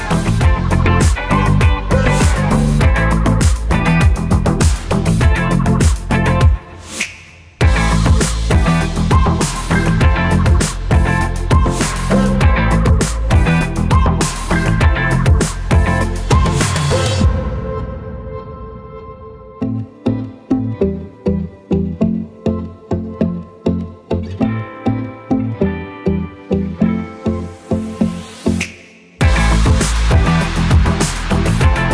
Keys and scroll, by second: 20.2 ctrl+v, 27.6 BackSpace.